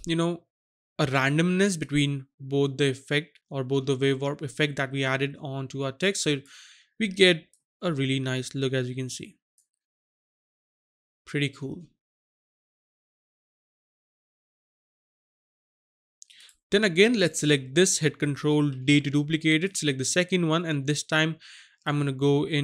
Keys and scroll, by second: 18.6 ctrl+d.